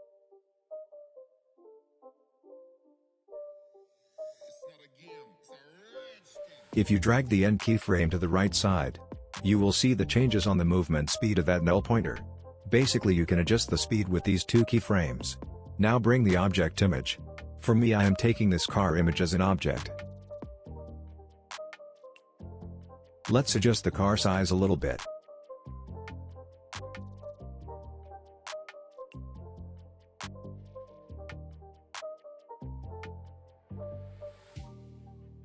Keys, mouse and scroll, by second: 0.9-2.4 drag, 2.6-3.3 scroll down 1, 3.3-5.8 drag, 14.4-15.1 alt+scroll up 1, 15.1-15.4 alt+scroll down 1, 16.0-20.1 drag, 23.2 s, 23.9-26.7 drag, 27.8 shift+r, 30.0-31.2 alt+scroll up 2, 32.1-33.6 drag.